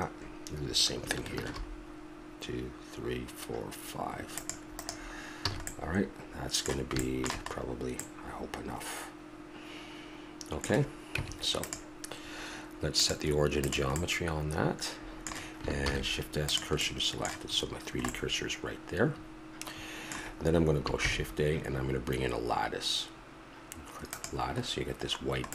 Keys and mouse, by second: 1.4 ctrl+r, 5.3 a, 5.7-7.5 middle drag, 11.2 Tab, 14.1-14.7 middle drag, 15.8 shift+s, 18.4-18.8 middle drag, 21.0 shift+a, 24.7-25.5 middle drag.